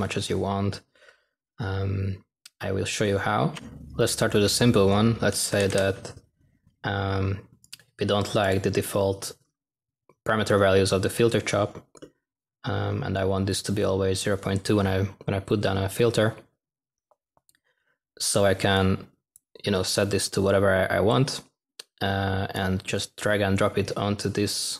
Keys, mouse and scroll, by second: 3.6 -, 5.2-6.0 typing.